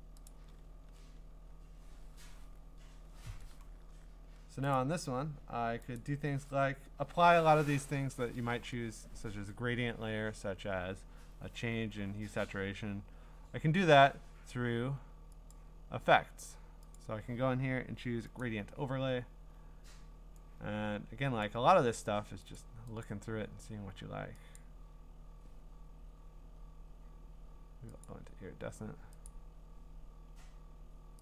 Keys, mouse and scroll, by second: 0.3 click, 4.8 click, 6.0 click, 15.5 click, 17.0 click, 22.6 click, 23.0 click, 23.6 scroll, 24.6 click, 24.9 scroll down 4, 25.4-26.6 scroll up 12, 26.6-28.1 scroll down 6, 28.1 click, 28.1-28.5 scroll, 29.3 click, 29.7-30.3 scroll.